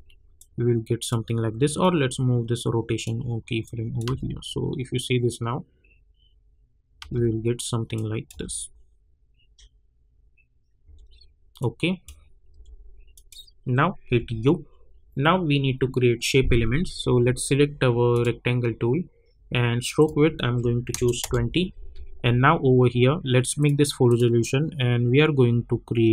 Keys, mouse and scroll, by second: 0.3-4.0 drag, 4.0 space, 6.9 space, 7.9 click, 8.3 space, 10.8 space, 11.6 click, 12.5 j, 13.1 click, 14.0 u, 18.1 click, 21.2 Return, 22.2-22.9 alt+scroll up 1, 23.6 click.